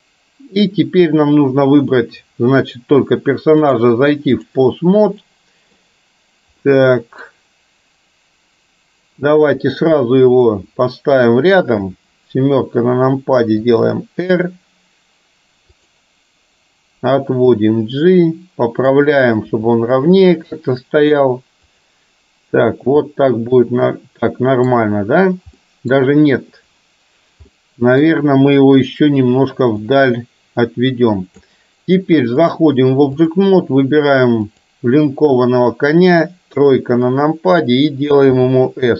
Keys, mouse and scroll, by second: 3.7-4.6 drag, 5.4-5.8 middle drag, 6.7-7.2 middle drag, 11.8 KP_7, 13.8 r, 17.7-19.6 drag, 19.6 r, 23.2-25.0 middle drag, 25.7-26.7 middle drag, 27.7 middle click, 31.4 click, 32.4-33.4 drag, 34.4 click, 36.6 KP_3, 38.4 s.